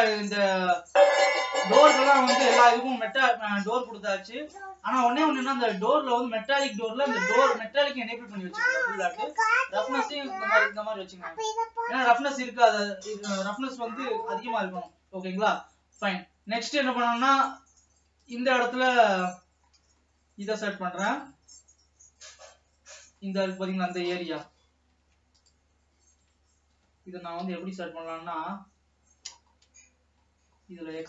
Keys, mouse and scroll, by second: 0.0-0.7 scroll up 1, 0.7-1.7 shift+middle drag, 1.7-2.7 scroll up 1, 2.7 middle click, 3.3-4.0 scroll up 6, 5.5 click, 11.6 ctrl+s, 15.7 scroll down 2, 16.6 scroll up 2, 17.0-18.6 scroll down 4, 18.6 click, 19.0-21.5 middle drag, 21.5 Tab, 21.8-23.6 middle drag, 23.6 alt+a, 24.4-25.7 scroll down 1, 25.7 alt+shift+click, 27.4 KP_3, 29.4-30.4 scroll up 4, 30.4-31.0 scroll down 2.